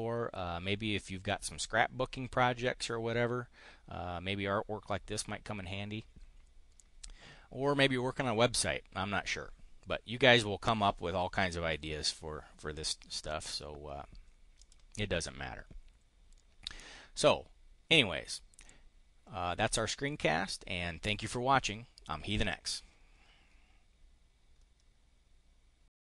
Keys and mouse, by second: 14.5 click.